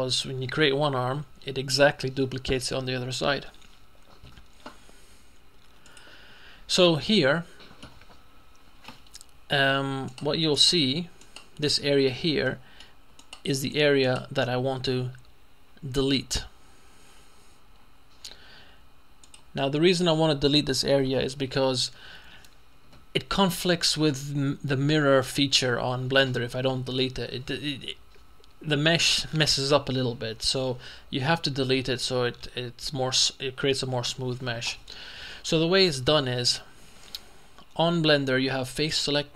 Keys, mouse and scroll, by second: 5.9 click, 6.9-8.3 middle drag, 8.3-9.3 scroll up 1, 10.6 shift+right click, 11.9 right click, 12.5 middle click, 14.1 right click, 19.3 click, 19.9 middle click, 21.7-22.8 scroll down 2.